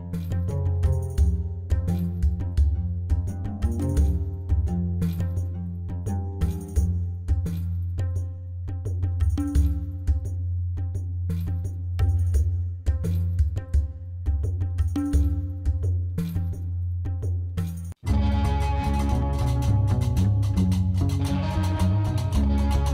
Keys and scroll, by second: 0.1 g, 0.2 r, 0.2 e, 0.4 n, 0.5 Return, 4.0-4.9 typing, 5.0 Return, 6.5 Tab, 8.3 b, 8.5 o, 8.5 w, 8.6 n, 8.8 Return, 12.0 ctrl+j, 14.3 -, 14.8 1, 15.0 ., 15.1 3, 15.2 Return, 20.2 alt+a.